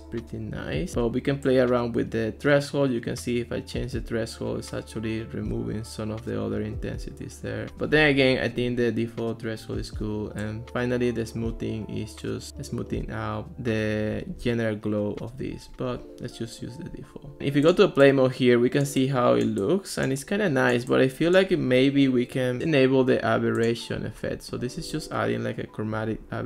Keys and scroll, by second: 7.7 super+z, 15.5 super+z.